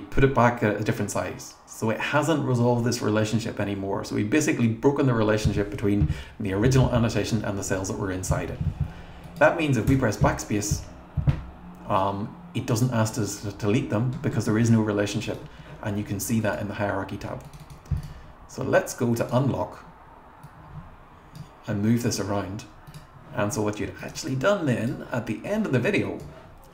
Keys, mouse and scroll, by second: 9.2 click, 9.9 BackSpace, 16.4 click, 17.4 click, 17.6 click, 18.0 click, 19.2 click, 20.4-21.5 drag, 22.9 click, 24.0 click, 24.2 click, 24.9 click.